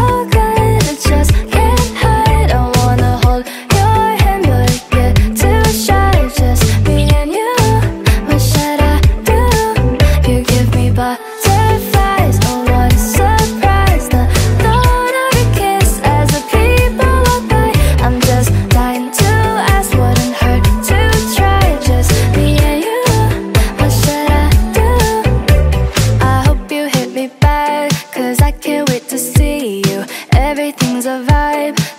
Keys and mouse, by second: 1.1 click, 2.1 click, 7.8 click, 10.7 click, 13.1 click, 16.6 click, 17.2 click, 22.0 alt+click, 22.5 click, 23.3 click, 24.6 alt+click, 25.2 alt+click, 25.6 click, 26.6 alt+click, 27.7 alt+click, 29.3 click, 30.2 alt+middle click, 30.4 alt+click, 30.8 alt+middle click, 31.2 click.